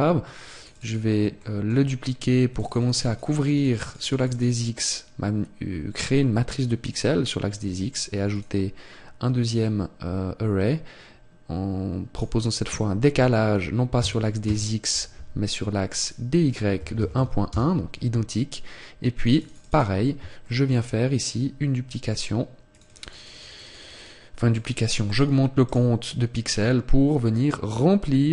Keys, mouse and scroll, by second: 0.4 click, 0.6 click, 1.3 shift+middle click, 2.4 click, 2.8 click, 3.0 click, 3.4 click, 7.6 click, 12.1 click, 14.4 Tab, 15.9 click, 19.1 click, 20.4 click, 20.4 shift+middle click, 22.6 click.